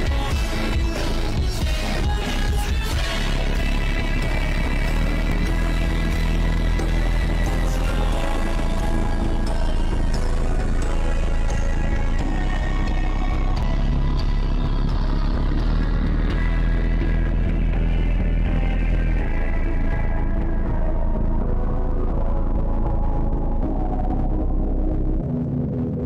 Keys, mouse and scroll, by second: 0.3 click, 0.6-1.8 drag, 1.9-3.2 drag, 3.2 ctrl+z, 3.4-3.9 drag, 3.9 ctrl+z, 4.1-5.3 drag, 5.8 drag, 6.0-6.5 scroll down 1, 6.5 click, 6.6-6.9 scroll down 1, 6.9 click, 7.4 click, 7.9 ctrl+z, 8.4 click, 10.3 click, 10.5 shift+`, 11.9-13.1 drag, 13.1 shift+`, 13.7 click, 14.2 click, 15.2 click, 16.0 shift+`, 17.2 click, 18.0 click, 18.6-20.8 drag, 20.8 middle click, 21.0 scroll up 3, 21.3-22.6 middle drag, 22.6-23.8 drag, 23.8 middle click, 24.2-26.0 drag.